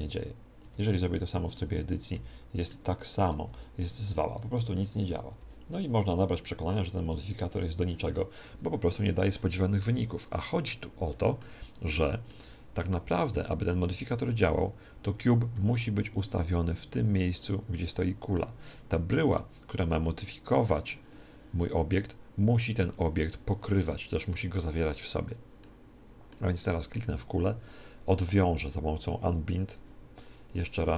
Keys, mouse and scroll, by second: 0.6 Tab, 1.1 r, 2.1 s, 3.2-6.8 right drag, 3.4 g, 5.4 g, 9.8-14.8 middle drag, 11.5 Tab, 13.1 Tab, 15.5 z, 16.1 click, 17.4-21.0 middle drag, 25.6-27.5 middle drag, 26.6 click, 26.6 right click, 29.6 click.